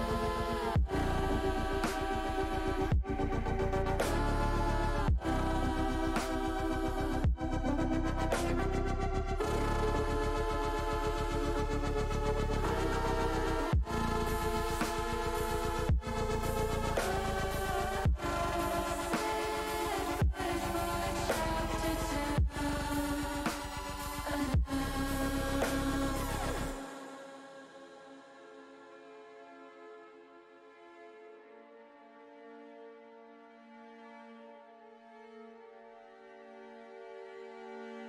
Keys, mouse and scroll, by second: 0.4 click, 1.7-2.9 middle drag, 3.7 middle click, 4.9 middle click, 6.0 shift+middle click, 7.6 ctrl+r, 8.9 right click, 9.6 middle click, 10.5 click, 12.2 middle click, 13.9 ctrl+r, 15.1 click, 15.5 middle click, 16.4 click, 17.7-19.5 middle drag, 20.7 middle click, 24.9 click, 26.2 click, 27.4 click, 29.5 l, 30.1 middle click, 31.9 s, 34.0 z, 35.9 click, 36.4 middle click, 37.6-38.0 drag.